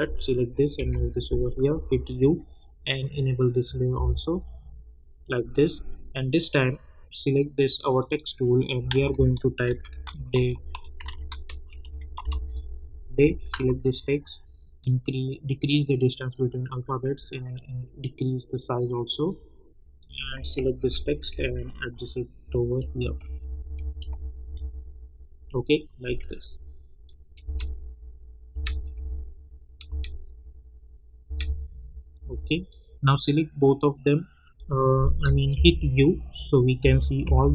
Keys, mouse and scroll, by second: 0.8 [, 1.7 u, 3.1 click, 3.9 k, 8.8 click, 8.9 ctrl+a, 9.4-12.7 typing, 11.0 ctrl+a, 13.5 ctrl+a, 14.8-20.0 drag, 20.7 ctrl+alt+Home, 21.3 Up, 26.4 click, 27.4 space, 28.9 j, 29.8 space, 32.2 j, 32.6 click, 35.5 u, 36.8 u, 37.2 j.